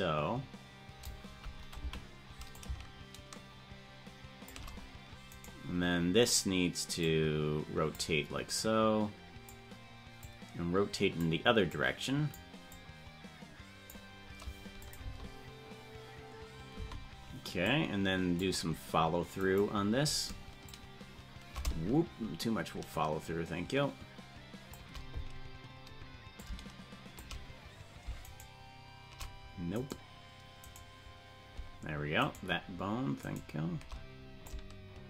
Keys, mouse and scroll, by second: 1.9 Right, 2.5-4.5 shift+drag, 5.7 right click, 7.0 click, 8.5 click, 10.2-11.2 drag, 11.7 click, 12.7-13.9 drag, 14.9 click, 15.1 space, 16.9 space, 17.7-18.5 drag, 19.7 right click, 20.6-24.8 shift+drag, 26.4 shift+click, 28.5 shift+right click, 30.1 right click, 31.5 shift+right click, 32.5-33.8 shift+right drag, 34.4-35.0 shift+drag.